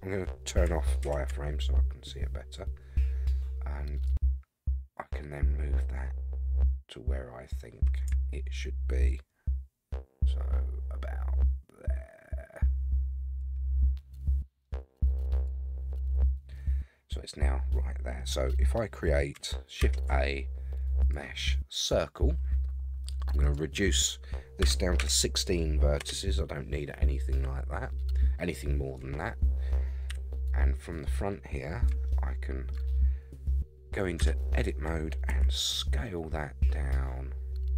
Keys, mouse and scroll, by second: 1.0 shift+z, 4.0-15.4 drag, 16.5-18.2 middle drag, 19.8 shift+a, 23.4-26.5 drag, 29.0-30.1 scroll down 2, 30.1 KP_1, 30.7-31.8 scroll up 4, 32.1-32.7 shift+middle drag, 34.2 Tab, 35.3 s.